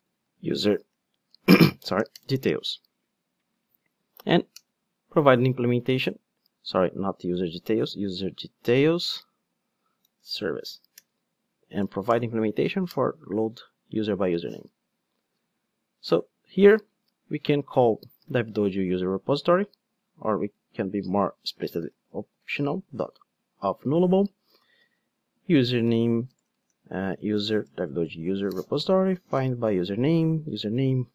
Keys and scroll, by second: 3.7 alt+Return, 11.0 Return, 11.7 alt+Return, 19.0 Return, 19.6 super+z, 24.0 Return, 28.5 Return.